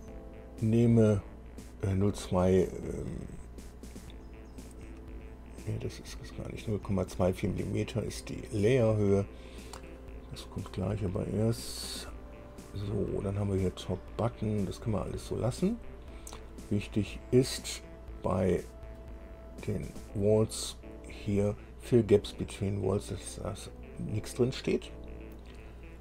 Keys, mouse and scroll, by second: 6.4-20.3 drag, 24.8-26.0 drag.